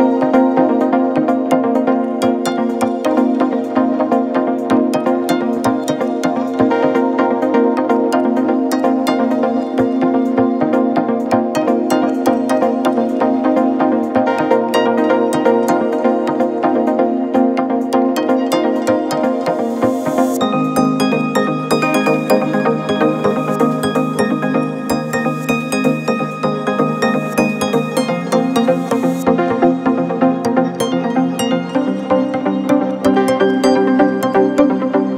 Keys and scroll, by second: 6.9 ctrl+t, 13.2 ctrl+t, 17.0 Down, 17.2 Down, 17.4 Down, 26.8 ctrl+-, 32.6 u.